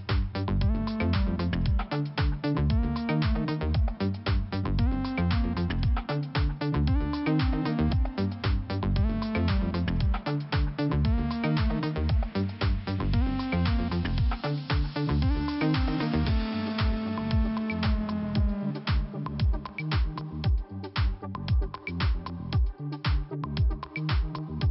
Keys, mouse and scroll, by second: 22.9 ;, 24.5 click.